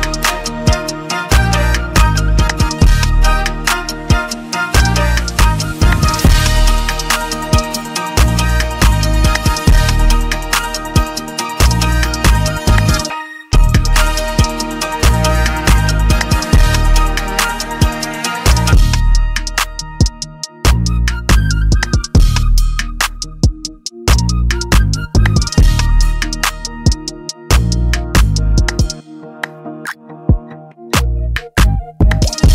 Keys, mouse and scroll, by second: 0.5 Delete, 0.5 click, 3.0 shift+click, 3.4 click, 5.1 click, 5.1 middle click, 5.8 click, 5.8 z, 7.8 F5, 7.8-12.6 click, 12.6 ctrl+click, 14.0 F10, 14.0 click, 15.0 click, 15.0 x, 15.9 click, 16.9 click, 16.9 x, 18.6 click, 22.8 click, 23.1 click, 23.1 z, 23.9 F10, 23.9 click, 25.2 click, 27.5 click, 29.3 click, 30.4 click, 30.8 click, 30.8 z, 31.6 click.